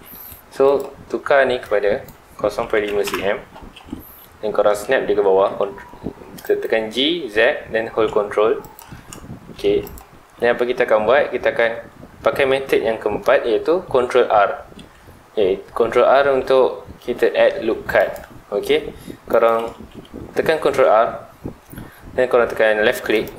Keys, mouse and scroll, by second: 0.0 Tab, 0.6 click, 1.6-3.1 drag, 3.1 KP_Enter, 3.8-5.2 middle drag, 5.2 g, 6.6 right click, 6.8 g, 8.7 ctrl+click, 8.9-9.8 middle drag, 9.8 click, 10.1 Tab, 10.4-13.5 middle drag, 14.7 ctrl+r, 19.4 right click, 19.7 ctrl+z.